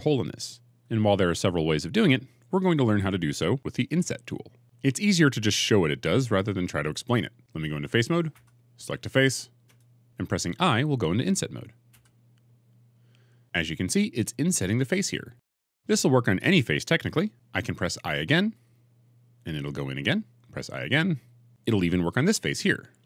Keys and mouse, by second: 8.2 3, 9.5 click, 11.8 i, 18.4 i, 19.3 click, 21.0 i, 22.9 click.